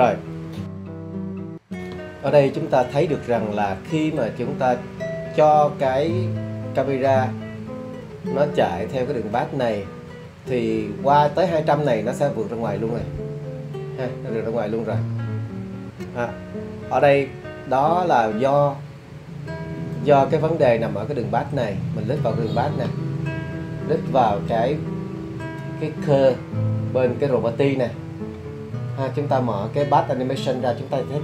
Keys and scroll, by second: 19.4-20.5 typing, 21.7 e, 23.1 d, 23.3 e, 23.4 r, 25.0 r, 26.7 space, 29.4-31.1 typing.